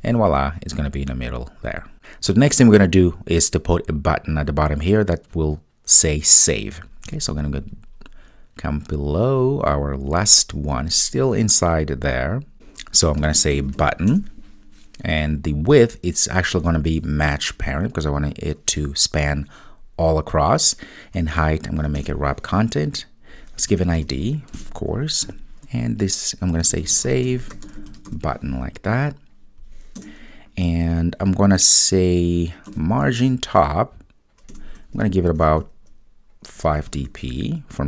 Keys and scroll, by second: 14.3 Return, 22.0 Return, 27.1 Return, 34.6 Return.